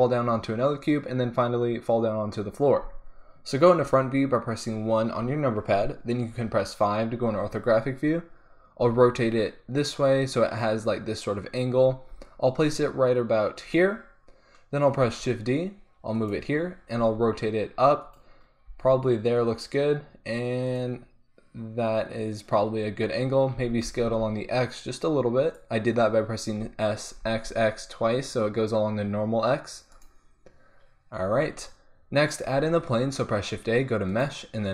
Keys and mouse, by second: 3.8 KP_1, 6.3 KP_5, 8.8 r, 9.9-11.9 drag, 11.9 g, 13.8-15.6 drag, 15.0 shift+d, 16.3-17.0 drag, 17.0 r, 18.8 g, 20.8-23.3 drag, 23.5 s, 25.5-28.7 drag, 26.5 s, 30.0-32.4 drag, 32.4 shift+a.